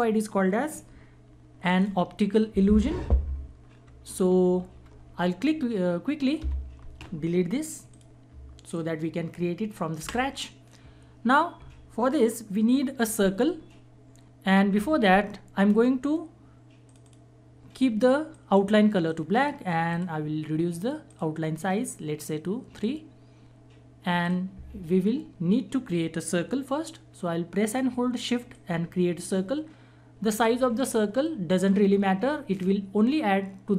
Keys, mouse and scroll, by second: 3.9 ctrl+-, 6.4 Escape, 7.9 click, 10.0 Delete, 16.8 click, 28.9-30.4 shift+drag.